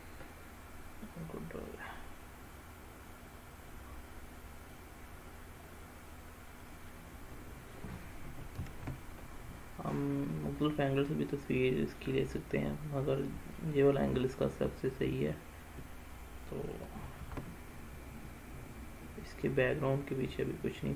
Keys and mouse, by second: 1.1-4.6 middle drag, 5.8-6.7 middle drag, 7.3-7.8 middle drag, 8.6 shift+a, 12.8 middle click, 14.7-15.4 middle drag, 16.9 shift+a.